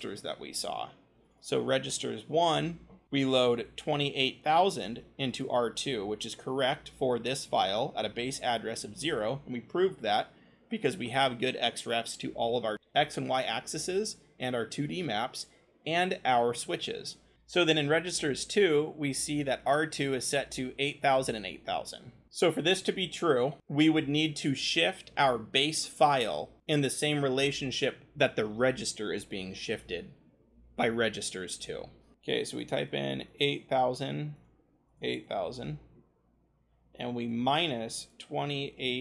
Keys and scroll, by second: 1.9 scroll, 6.8-8.0 scroll, 17.3-18.0 scroll.